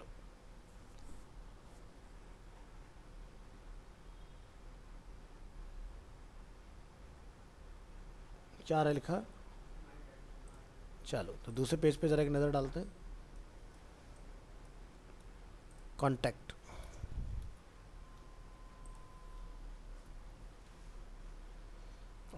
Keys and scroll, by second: 15.2 ctrl+c, 17.2 ctrl+Home, 20.7 ctrl+v.